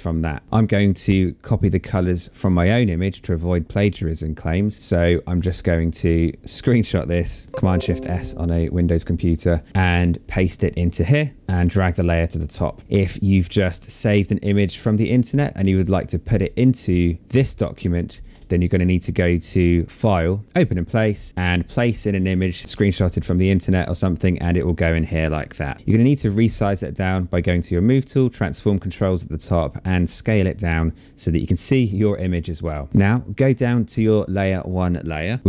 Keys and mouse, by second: 4.7 click, 8.9 click, 10.0 click, 11.2 ctrl+v, 11.3 click, 13.0 click, 15.5 click, 16.9 click, 17.9 Return, 19.7 click, 23.0 click, 26.7 click, 30.0 click, 33.8 click.